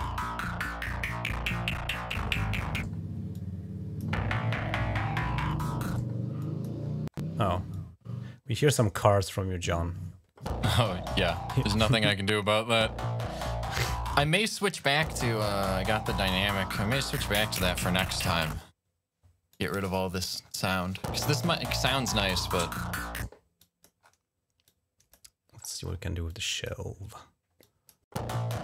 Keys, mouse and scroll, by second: 3.2 click, 5.3 click, 6.2 click, 6.7 scroll up 2, 7.0-7.3 scroll down 3, 7.6 click, 11.2 click, 13.6 click, 14.3 click, 16.2 click, 17.0 click, 17.5 click, 19.3 click, 20.0-20.6 scroll up 5, 21.4 click, 23.4 click, 23.9 scroll up 1, 24.5 click, 25.4-25.8 scroll up 4, 26.1 click, 26.7-27.2 scroll down 3, 27.4 click.